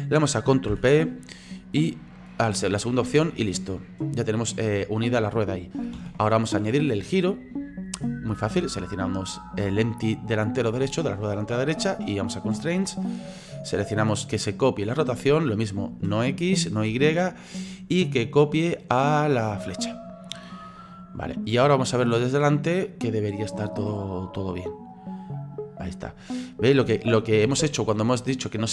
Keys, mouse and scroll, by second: 0.7 ctrl+p, 3.1-6.0 drag, 6.0 ctrl+z, 7.2-8.3 scroll up 3, 8.3 right click, 12.3 click, 13.3-16.0 drag, 16.9 click, 17.5-20.6 drag, 20.6 right click, 21.2 right click, 21.5-23.6 middle drag, 23.6 click, 24.9-27.5 drag, 27.5 ctrl+z, 27.8-28.7 middle drag.